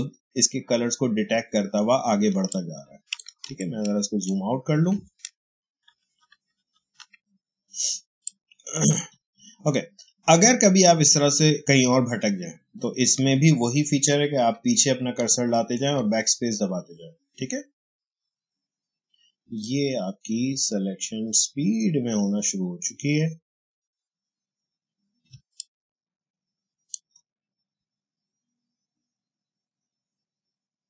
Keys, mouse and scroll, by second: 2.2 space, 2.4 click, 2.7 space, 3.5-5.8 ctrl+drag, 5.8 ctrl+-, 7.7 space, 8.1 click, 8.3 space, 8.4 h, 14.2 BackSpace, 25.2 space, 25.5 click, 25.7 space.